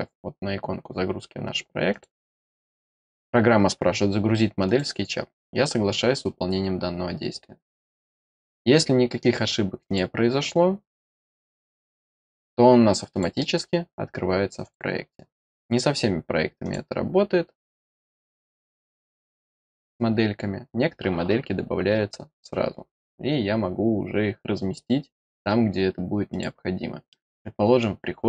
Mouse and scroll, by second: 1.8 click, 4.6 click, 9.0-9.8 middle drag, 9.8 click, 10.9 click, 13.0 click, 14.5 click, 15.2 middle click, 16.5 click, 18.5 click, 23.2 middle click, 26.2 click, 27.0 middle click.